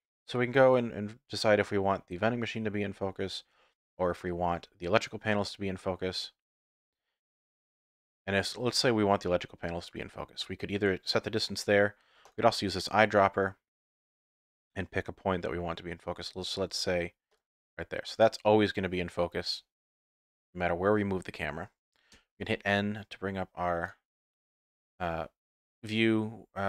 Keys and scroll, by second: 22.3 n.